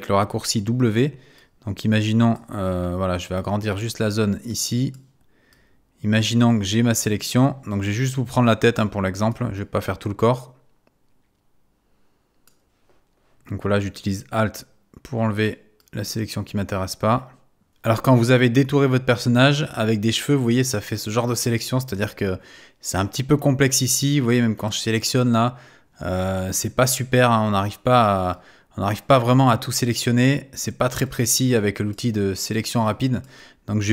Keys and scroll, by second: 0.8 w.